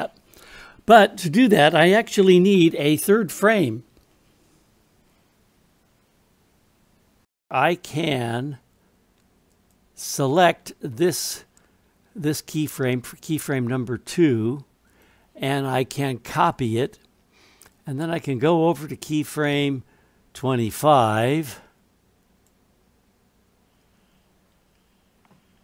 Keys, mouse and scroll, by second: 9.5 click, 9.7 typing, 11.9 typing, 14.9-16.7 right drag, 17.7-20.4 drag, 21.5 click.